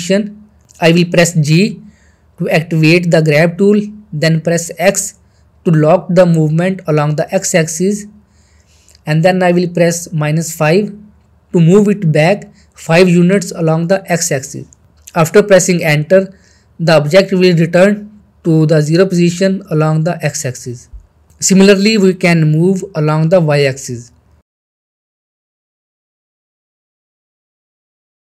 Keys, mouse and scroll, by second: 0.3 g, 1.6 x, 7.7 x, 10.9 x, 14.6 x, 14.8-16.4 middle click, 18.9-21.2 shift+middle drag, 22.5 g, 23.9 y.